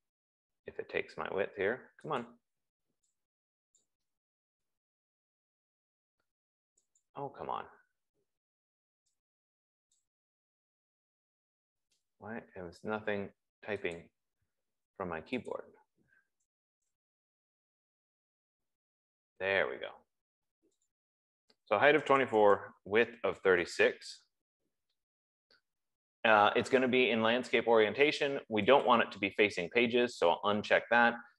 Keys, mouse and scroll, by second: 0.3 click, 2.6 click, 3.3-5.3 typing, 4.3 click, 7.5 click, 9.9-11.3 typing, 10.5 click, 14.6 click, 15.9 click, 17.0 BackSpace, 17.1 BackSpace, 18.3-19.3 typing, 21.4 click, 22.2-28.4 typing, 25.4 Tab, 27.8 F15, 29.4 click.